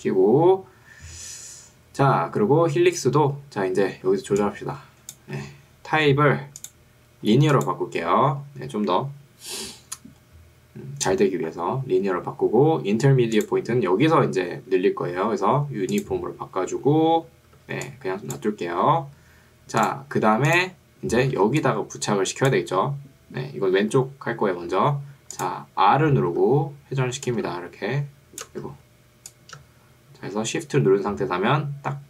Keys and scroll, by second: 4.2 ctrl+2, 5.4 Escape, 17.8 2, 18.8 Escape, 21.4 ctrl+2, 23.8 Escape, 26.4 r, 28.8 ctrl+z.